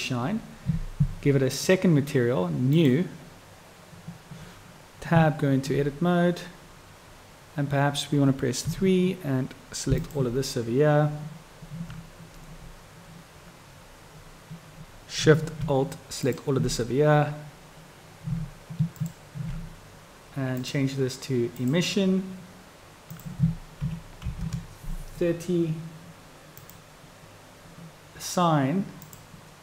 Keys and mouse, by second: 1.6 click, 5.3 Tab, 10.1 alt+click, 19.0 alt+shift+click, 20.7-21.9 drag, 23.2-25.7 drag, 26.8 click, 29.1 click.